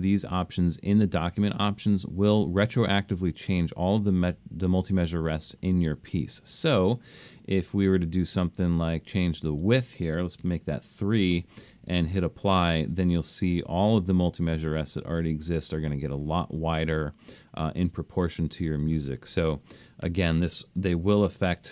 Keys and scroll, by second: 10.5 3, 19.7 super+z, 21.0 alt+super+a.